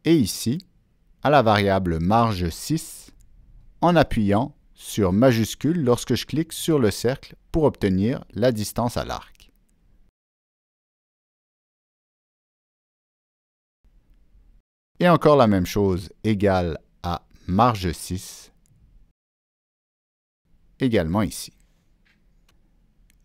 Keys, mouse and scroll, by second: 0.9 shift+click, 2.4 click, 3.3 click, 6.2 Down, 6.2 click, 6.4 Down, 6.6 click, 7.2 Return, 9.0 click, 14.2 shift+click, 16.5 click, 17.5 click, 20.6 Down, 21.5 Return.